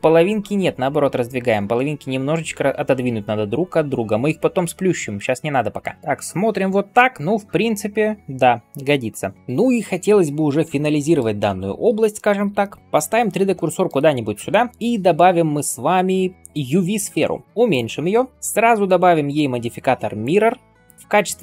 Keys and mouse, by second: 0.3 [, 0.5 [, 2.6 [, 2.7 [, 3.0 [, 10.7-12.8 shift+drag, 10.7-12.8 shift+middle drag, 10.7-14.1 shift+right drag, 14.1-14.7 middle drag, 14.7 shift+a, 16.9-18.3 middle drag, 17.4 s, 18.0 s, 20.2-21.4 drag.